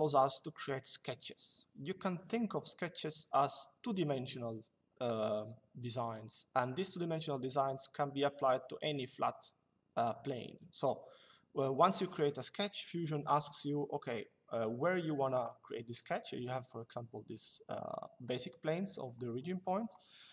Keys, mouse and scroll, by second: 13.1 click.